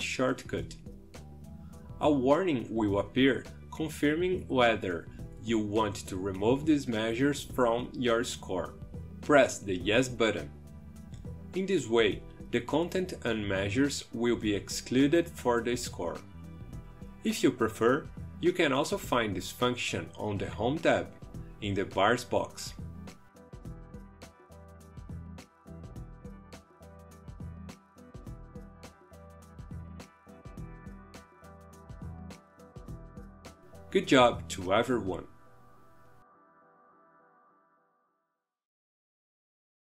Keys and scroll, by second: 1.9 ctrl+Delete.